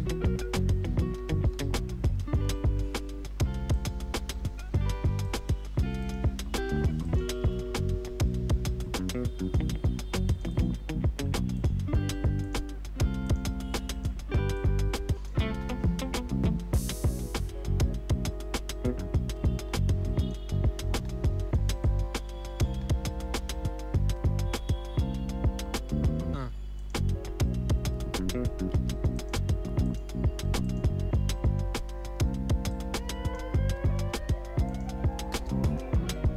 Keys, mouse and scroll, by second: 0.0-2.1 typing, 3.7 click, 4.1 ctrl+d, 5.2 click, 7.4 s, 8.8-15.5 drag, 15.5 space, 19.5 space, 20.0 click, 20.4 space, 21.8 click, 22.7 space, 25.0 space, 26.8 click, 27.7 F4, 28.7 ctrl+a, 29.1 click, 33.9 s, 34.7 click, 35.6 Return.